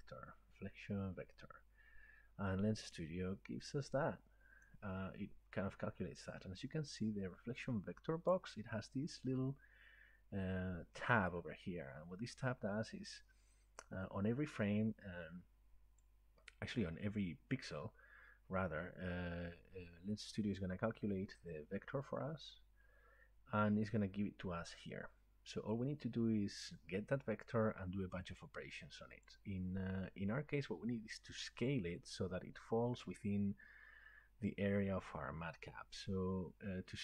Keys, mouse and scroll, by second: 3.0 click, 4.7 click, 8.3 click, 16.0 click, 20.6 click, 27.4-34.4 drag.